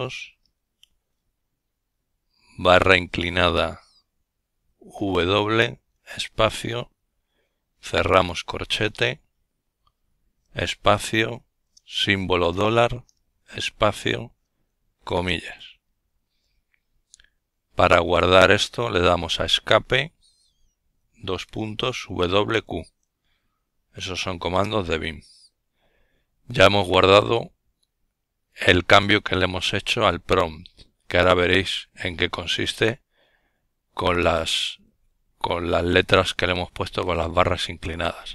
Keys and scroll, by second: 1.0 \, 2.5-3.2 typing, 5.6 typing, 9.8 shift+4, 12.7 typing, 17.1 Escape, 19.1-20.1 typing, 22.1 Return, 36.6-38.3 typing.